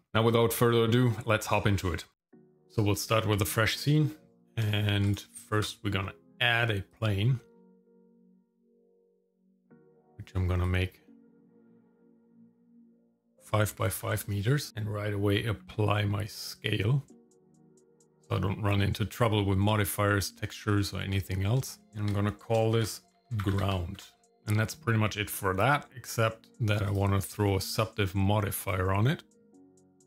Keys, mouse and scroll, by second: 0.0 click, 5.1 click, 5.5 shift+a, 9.7-11.4 drag, 11.9-14.0 drag, 15.6 ctrl+a, 17.1 middle click, 17.5-18.7 scroll up 1, 18.8 middle click, 19.7-21.0 shift+middle drag, 21.6 shift+middle click, 21.9 scroll up 1, 22.0 F2, 26.1 click, 26.9 click, 28.6-30.0 drag.